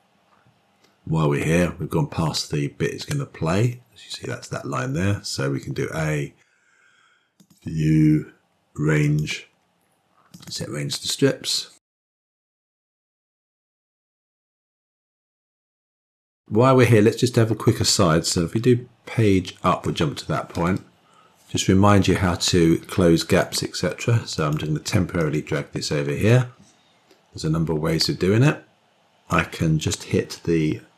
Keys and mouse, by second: 5.6 a, 7.2-10.3 drag, 13.5-14.5 drag, 15.9-17.8 drag, 19.2 Page_Up, 23.3 click, 25.0-26.3 drag, 28.5 click.